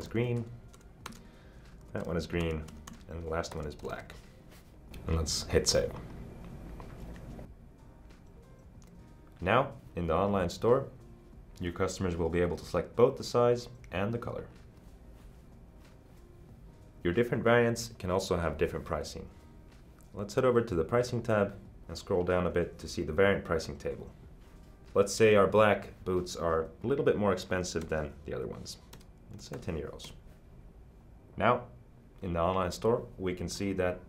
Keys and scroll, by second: 0.0-4.5 typing, 1.1 Tab, 27.9 Delete, 29.2-30.1 typing.